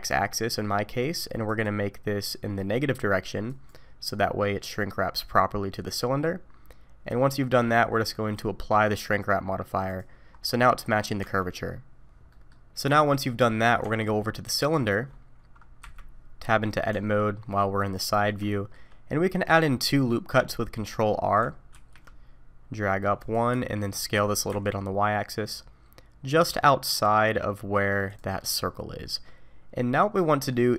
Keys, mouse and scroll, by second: 1.5 click, 3.5 click, 4.1 middle click, 7.0 middle click, 9.9 click, 10.3-10.6 scroll up 3, 10.6 middle click, 11.2 Tab, 12.3 middle click, 12.8-13.1 scroll down 3, 13.0 middle click, 13.8 Tab, 14.6 click, 15.8 KP_3, 16.9 Tab, 17.9-18.5 scroll up 2, 18.5 shift+middle click, 21.7 ctrl+r, 24.1 s, 29.0 middle click.